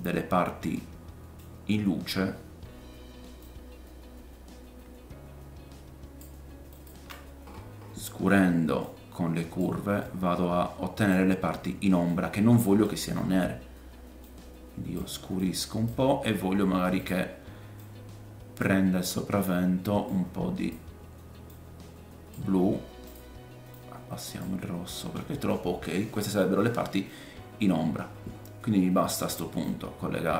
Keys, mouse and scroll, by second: 0.0 scroll down 1, 0.8 middle click, 3.4-6.9 middle drag, 3.4-6.9 right drag, 7.4-8.8 scroll up 4, 8.8-14.6 middle drag, 8.8-14.6 right drag, 15.3 click, 17.1 click, 20.1 click, 23.1 click, 25.3-26.8 scroll down 5, 26.8 middle click, 26.8-27.9 scroll down 1, 27.9-30.3 middle drag, 28.1-29.3 scroll up 3, 29.6 click.